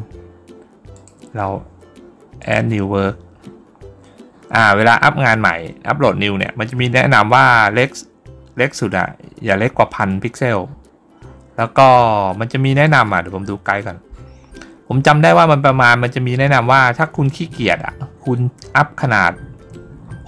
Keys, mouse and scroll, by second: 0.8 click, 2.2 click, 4.2 scroll down 1, 12.7 click, 14.9-15.5 scroll down 1, 16.2-16.6 scroll down 1, 17.0-17.8 scroll down 2, 18.4-20.2 scroll down 1.